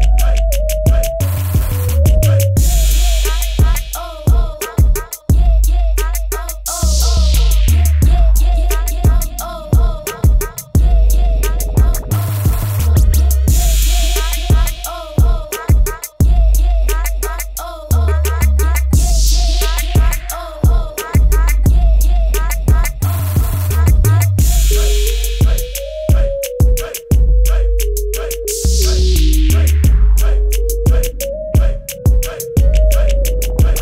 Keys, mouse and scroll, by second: 1.3 ctrl+a, 2.9 click, 5.1 click, 8.9 space, 9.3 click, 9.4 space, 9.9 click, 14.1 click, 19.6 KP_Subtract, 19.9 KP_4, 31.7 F9, 31.9 space, 32.1 click, 32.3 ctrl+=, 32.5 space, 32.8 b, 33.4 click.